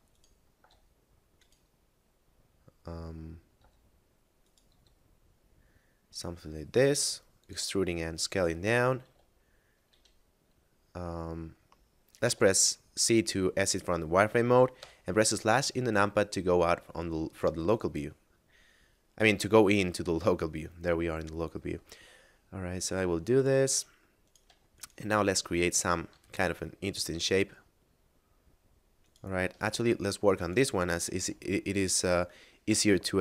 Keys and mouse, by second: 0.0 right click, 0.5 s, 1.4 right click, 3.5 e, 4.4 right click, 4.7 s, 7.2 click, 8.9 middle click, 9.1 z, 9.5 middle click, 9.7 z, 12.1 z, 14.5 KP_Divide, 16.1 middle click, 18.6 middle click, 21.9 middle click, 22.8 s, 23.2 click, 23.7 middle click, 24.2 right click, 24.7 shift+right click, 25.1 middle click, 26.1 e, 28.9 right click, 29.5 ctrl+z, 29.9 middle click, 30.3 right click, 30.7 shift+right click, 31.2 e, 32.7 y.